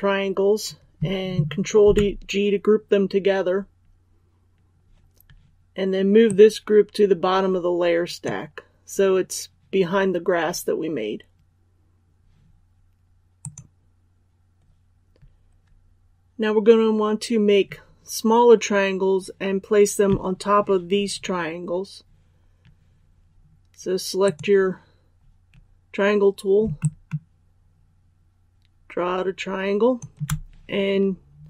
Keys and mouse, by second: 1.7 ctrl+g, 6.2-8.9 drag, 26.7-29.9 shift+drag.